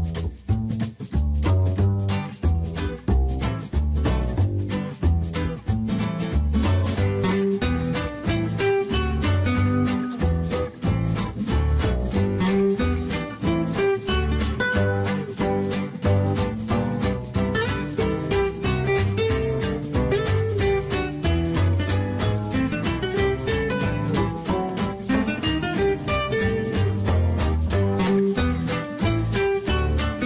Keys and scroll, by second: 15.3 e.